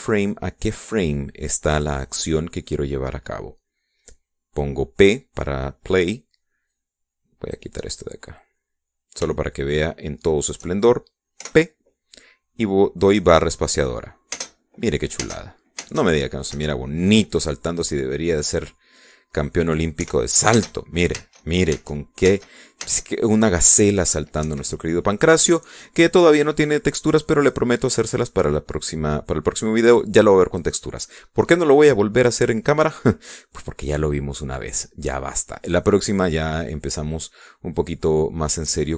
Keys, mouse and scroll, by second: 7.8-8.8 drag, 9.3 scroll down 2, 10.1 scroll down 2, 10.4-11.7 shift+drag, 12.5 p, 15.4 space, 16.3 space, 17.6 Escape, 17.9-20.7 drag, 21.1 p, 21.6 space, 25.5 Escape, 26.3-29.1 drag.